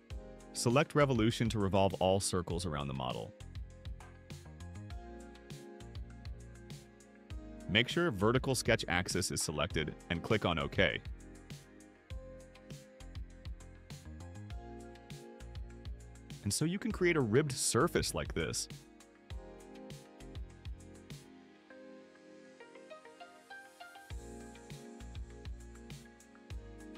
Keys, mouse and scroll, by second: 4.2 click, 12.3 click, 19.2-21.9 drag, 22.1 right click, 24.2 middle click, 24.6 middle click, 24.7 scroll up 2, 25.6 middle click.